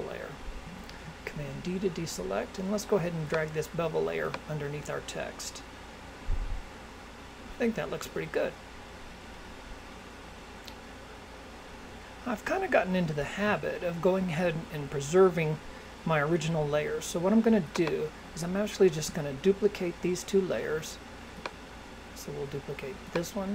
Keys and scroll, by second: 0.9 super+d.